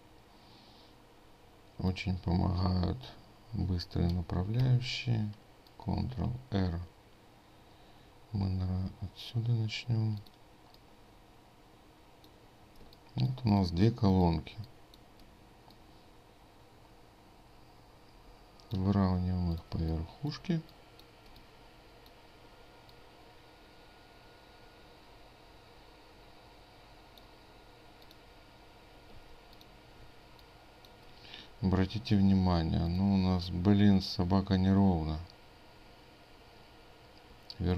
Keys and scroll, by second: 4.6 ctrl+r.